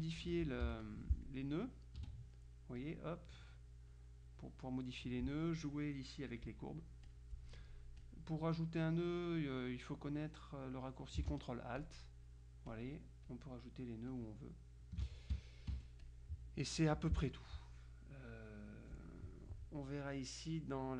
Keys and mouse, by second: 0.3 Escape, 0.7 F6, 0.9 click, 2.1 F2, 2.9-4.1 drag, 5.2-6.3 drag, 6.7-7.7 drag, 8.1 click, 11.9 ctrl+alt+click, 12.8 click, 14.2 click, 15.8 F1, 16.1 click, 17.1 Delete.